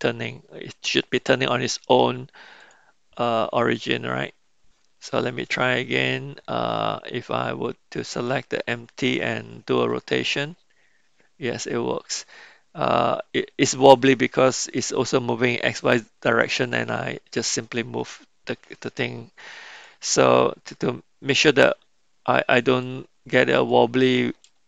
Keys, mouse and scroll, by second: 2.6 click, 3.7 click, 8.1 click, 9.7 r, 19.7 click, 22.7 click, 23.5 click.